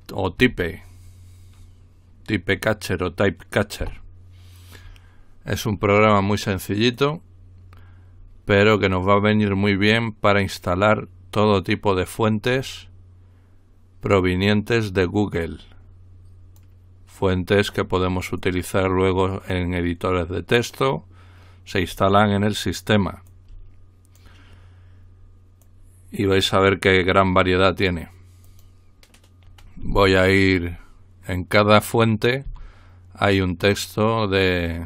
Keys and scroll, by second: 0.4 y, 3.8 Return, 32.6 Down.